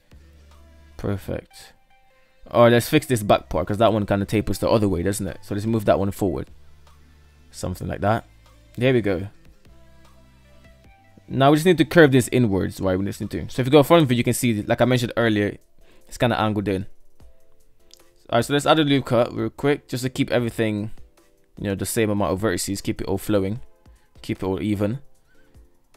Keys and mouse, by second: 0.7-1.4 shift+middle drag, 2.8 right click, 3.7 g, 8.1 shift+middle click, 8.4 Tab, 8.9 alt+z, 9.2-10.4 middle drag, 11.4 alt+z, 11.8-12.1 middle drag, 12.6 KP_1, 15.0 Tab, 15.1-15.8 middle drag, 15.2 KP_3, 17.1 ctrl+r, 20.4 ctrl+r, 23.4 shift+middle click, 24.4 ctrl+r.